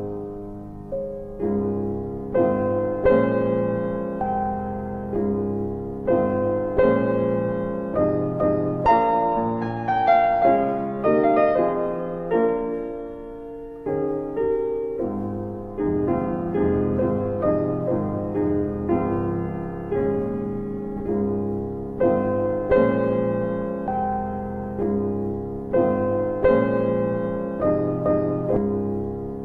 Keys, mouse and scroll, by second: 1.2 alt+middle click, 2.8 double click, 4.9 ctrl+click, 5.7 double click, 6.4 alt+middle click, 9.8 e, 11.4 click, 12.7 ctrl+z, 13.8-14.5 typing, 15.9 click, 19.7 click, 22.6 double click, 22.9 click, 23.0 double click, 23.3 click, 23.5 double click, 25.7 click, 28.7 middle click.